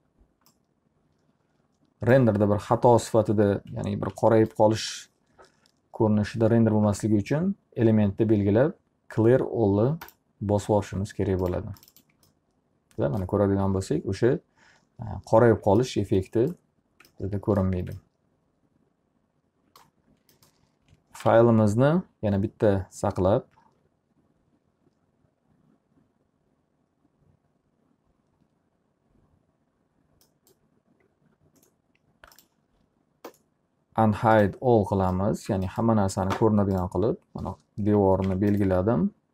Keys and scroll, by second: 21.3 ctrl+s, 38.0 F3.